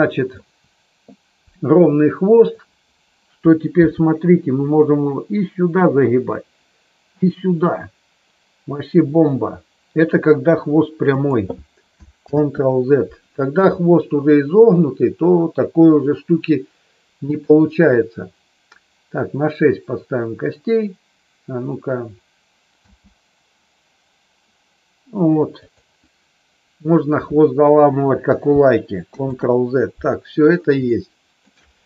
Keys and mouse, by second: 2.3 click, 3.8 g, 11.0 click, 12.3 ctrl+z, 17.3 click, 22.8 g, 25.5 click, 29.0 ctrl+z, 30.8 middle click.